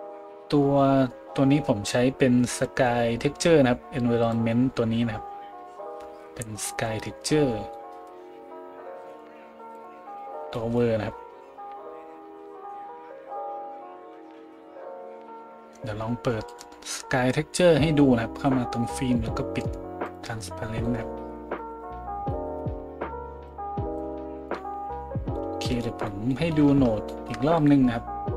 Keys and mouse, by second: 2.5 click, 2.6-9.2 middle drag, 9.2-16.5 drag, 16.5-20.0 middle drag, 20.0 click, 20.1-24.6 middle drag, 23.5-28.3 drag, 27.6 middle click, 27.6 right click.